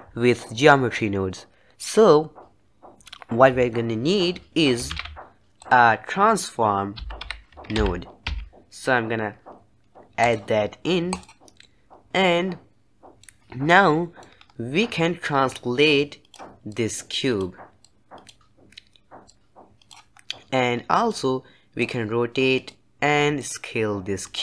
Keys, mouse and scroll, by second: 14.1-14.5 middle drag, 14.5 scroll up 2, 15.8 click, 17.0 click, 18.1 click, 19.6 click, 20.3-21.2 scroll down 3, 21.2 middle click, 22.1 click, 23.7 click.